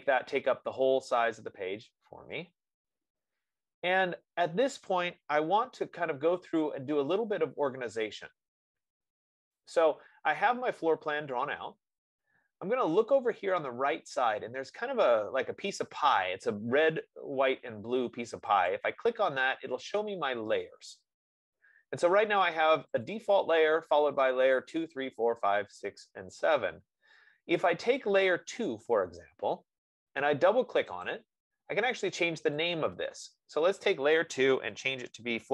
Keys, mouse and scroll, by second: 4.7 scroll, 8.9 middle click, 9.7-14.7 drag, 19.1 click, 23.5 click, 28.1 click, 31.1 click, 31.5 click, 33.5 click, 34.4 F15.